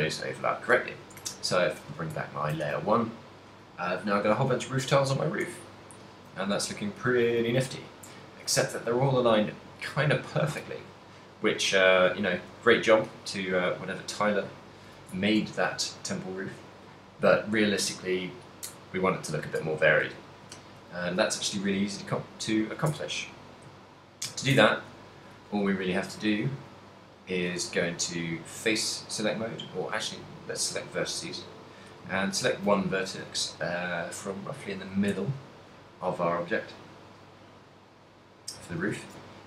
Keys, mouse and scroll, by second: 0.1 middle click, 1.3 shift+1, 2.0 a, 2.5 ctrl+middle click, 2.9 a, 3.2 middle click, 4.8 ctrl+middle click, 5.8 shift+middle click, 6.4 middle click, 11.2 middle click, 11.8 z, 12.4 shift+middle click, 12.9 middle click, 12.9 z, 15.3 ctrl+middle click, 15.8 shift+middle click, 16.0 shift+middle click, 20.0 Tab, 20.6 shift+middle click, 20.6 z, 21.2 2, 21.6 z, 22.0 middle click, 23.5 Tab, 23.5 right click, 23.9 z, 24.3 z, 24.7 Tab, 26.3 click, 26.7 click, 28.0 z, 28.5 middle click, 29.9 click, 32.0 right click, 32.8 z, 33.3 z, 34.0 right click, 34.5 right click, 35.3 z, 35.5 middle click, 38.3 middle click.